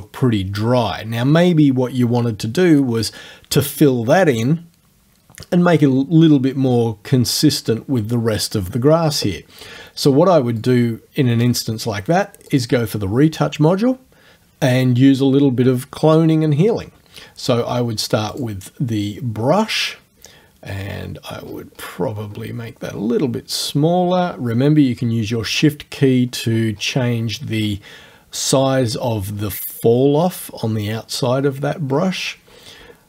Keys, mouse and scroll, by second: 10.6 click, 12.5 click, 18.4 click, 20.7 scroll down 1, 21.4-22.0 scroll up 2, 25.8-26.7 shift+scroll up 1, 26.7-28.1 shift+scroll up 5, 28.4-28.9 shift+scroll down 2, 28.9-30.1 shift+scroll down 6, 31.4-32.2 shift+scroll down 4, 32.5-33.0 shift+scroll up 2.